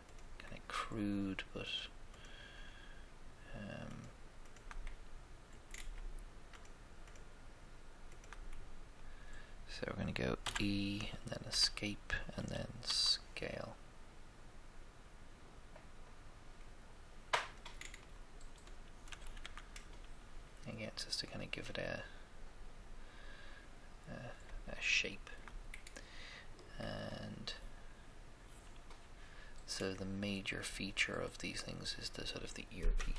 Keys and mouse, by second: 2.3-4.9 shift+right drag, 4.9 shift+middle click, 10.4 e, 10.5 e, 11.5 Escape, 12.8 s, 17.8 middle click, 18.7 middle click, 18.9 middle click, 19.4 Tab, 22.9 middle click, 23.1 middle click, 23.3 middle click, 24.7-26.0 shift+middle drag, 26.8 middle click, 27.0 middle click, 27.2 middle click, 31.2-33.0 middle drag.